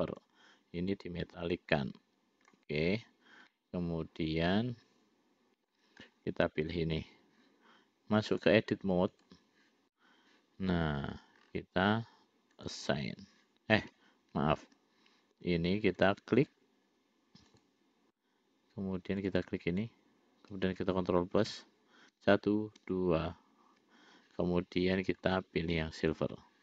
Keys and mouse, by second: 0.6-3.2 drag, 4.4-6.2 middle drag, 8.7-9.8 drag, 12.9 click, 15.1 ctrl+z, 18.4 click, 19.5 click, 21.9 ctrl+KP_Add, 22.6 ctrl+KP_Add, 23.3 ctrl+KP_Add, 25.6 click, 26.5 click.